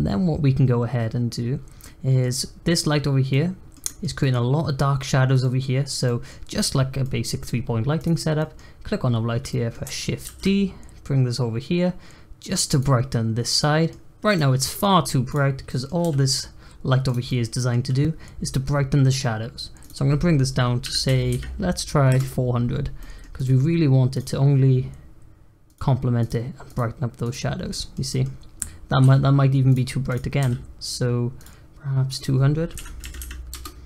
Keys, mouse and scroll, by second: 0.1-1.0 scroll down 1, 1.0-1.8 scroll down 2, 1.8 middle click, 2.2 scroll up 1, 2.3-3.2 scroll down 1, 3.2-5.8 middle drag, 5.8 scroll down 1, 6.0 middle click, 6.5-7.0 scroll up 1, 7.0 middle click, 7.9 click, 8.3-10.2 middle drag, 10.2 shift+d, 13.5 middle click, 14.2 click, 14.5 middle click, 15.2 click, 15.6 middle click, 16.0 g, 17.2-19.8 middle drag, 19.8-21.2 drag, 21.2 0, 22.9 middle click, 23.3 click, 24.0 click, 25.6 click, 26.2 click, 26.6 click, 27.2 click, 27.7-29.0 middle drag, 29.0 g, 29.6 click, 30.0 click, 30.3 g, 32.1-33.1 drag, 33.1 0.